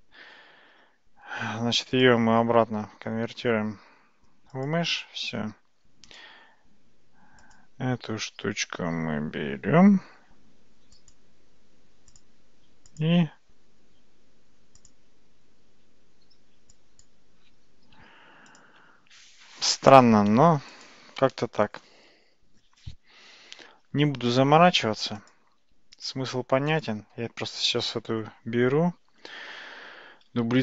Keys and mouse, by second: 2.0-4.7 drag, 6.1 click, 7.4 click, 11.0 click, 12.1 click, 16.8-17.1 drag, 18.0 x, 20.8 click, 23.6 x, 25.7 x, 26.7 click, 30.5 shift+d.